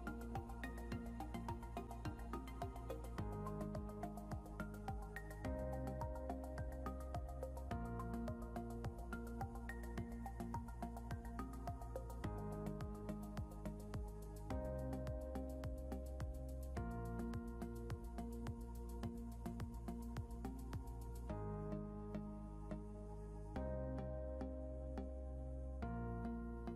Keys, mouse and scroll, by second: 6.9 click, 12.2 ctrl+Home, 14.5 click, 20.0 click, 23.3 click.